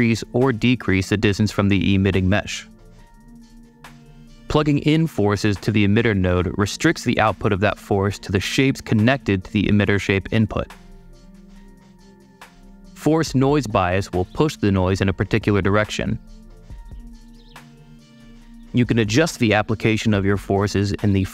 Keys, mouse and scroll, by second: 3.9 click, 7.0 super+space, 8.0-8.6 super+drag, 9.5 super+click, 9.6 super+click, 10.2 super+click, 11.6 space, 12.0 super+click, 12.0 super+click, 12.9-14.8 super+drag, 15.0-16.7 super+drag, 16.9-18.5 super+drag, 18.6 super+click.